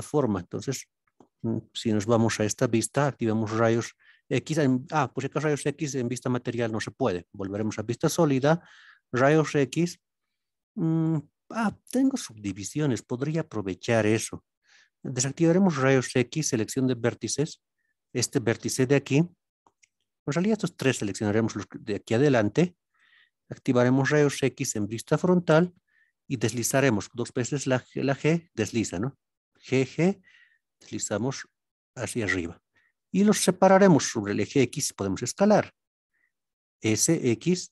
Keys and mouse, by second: 0.9 middle click, 1.7 KP_1, 3.0 alt+z, 7.6 click, 8.5 alt+z, 15.2 alt+z, 16.3 1, 17.5 click, 20.5-21.1 drag, 21.8-22.9 middle drag, 23.8 alt+z, 24.1 KP_1, 29.4 g, 32.2 click.